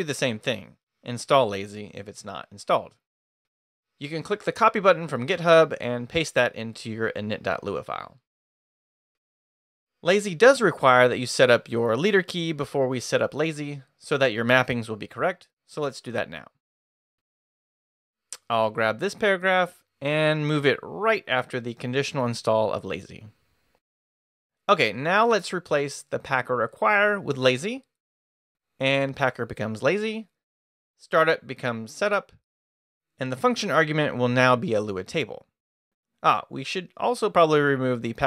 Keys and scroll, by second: 6.6 super+Tab, 8.2 super+v, 9.7 Return, 15.0 Home, 16.7-18.0 typing, 19.1-20.0 typing, 21.2 d, 22.5-24.4 typing, 25.5-27.7 typing, 29.2-33.5 typing, 31.2 Escape, 34.6 shift+c, 35.1 shift+[, 35.3 shift+Escape.